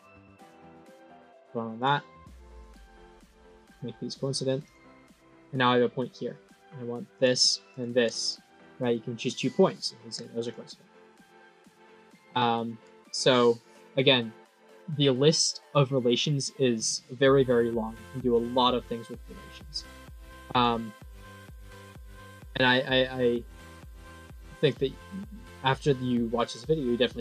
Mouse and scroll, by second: 0.5 click, 1.2 right click, 1.7 click, 2.4 click, 3.0 click, 4.5 click, 4.9 click, 7.0 click, 7.6 click, 10.3 click, 11.0 click, 12.3 middle click, 17.3 middle click, 20.2 click, 21.3 click, 22.0-23.1 drag, 24.5-27.2 drag.